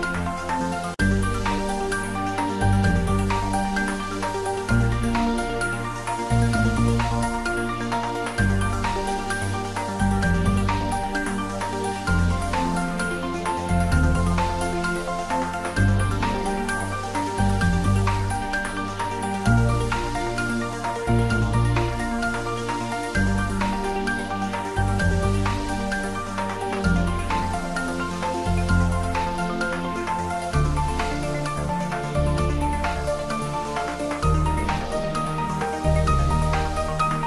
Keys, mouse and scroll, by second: 0.3 click, 1.8 `, 2.0 3, 3.8 click, 5.4 scroll up 1, 5.9 middle click, 6.4 click, 10.4-11.3 scroll down 1, 12.7 scroll down 1, 13.0 middle click, 13.5 click, 13.9 scroll up 1, 14.1-15.4 middle drag, 15.4-19.1 drag, 19.1 scroll down 1, 19.8 click, 23.0-23.8 scroll down 1, 23.8 middle click, 24.5-25.3 scroll down 1, 25.3 click, 26.7 click, 27.6 click, 28.3 scroll up 1, 29.0-31.2 drag, 31.4 shift+click, 35.2 ctrl+j, 36.3 click.